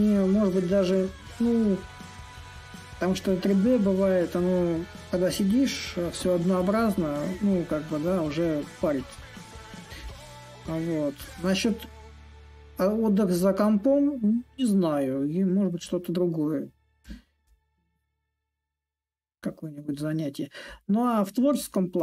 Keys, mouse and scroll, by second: 1.5-6.5 drag, 6.8-11.8 drag, 12.2-17.2 drag, 18.4-22.0 drag.